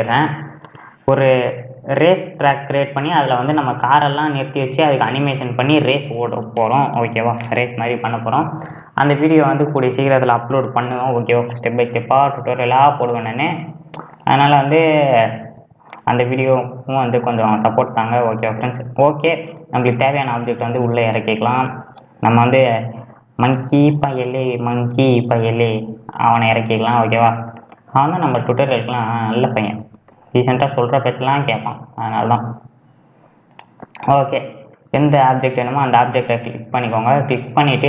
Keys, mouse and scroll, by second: 9.3-10.0 scroll down 1, 10.0-10.7 scroll down 1, 11.4-13.3 middle drag, 13.3 `, 15.3-16.7 middle drag, 16.7-17.3 scroll up 2, 17.3-19.0 middle drag, 19.0-20.2 scroll up 2, 20.2-22.7 drag, 22.7 scroll up 5, 23.6-25.8 right drag, 25.8 g, 28.4 KP_2, 29.0 KP_3, 31.4 g, 34.2-36.8 middle drag, 36.8-37.8 drag.